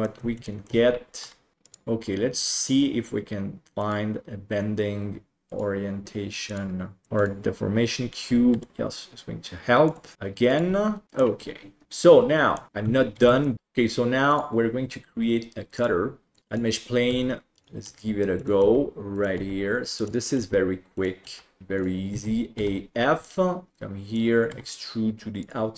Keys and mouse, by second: 0.4 shift+middle drag, 1.2 r, 1.6-3.9 drag, 5.4 click, 6.4 click, 7.0 click, 8.5 r, 10.1 g, 11.0 middle click, 11.8-12.5 middle drag, 12.7 alt+a, 15.7-16.6 drag, 17.0 Tab, 17.5-22.6 typing, 22.1 middle click, 23.2 middle click, 23.7 click, 24.5 e.